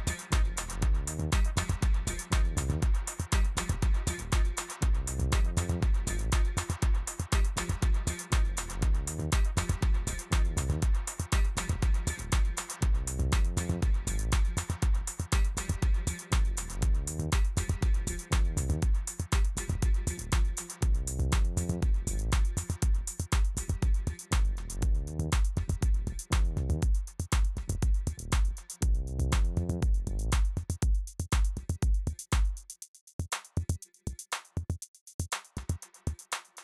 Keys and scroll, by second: 0.0 ctrl+f, 2.4 t, 29.6 z, 32.5 ctrl+c, 33.4 ctrl+v, 35.7 t.